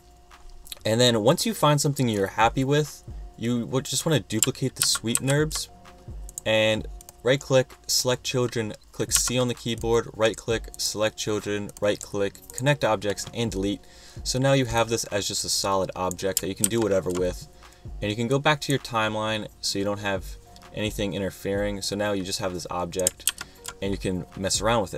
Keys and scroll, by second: 4.9 super+c, 5.2 super+v, 9.3 c, 16.8 super+z, 23.4 super+z.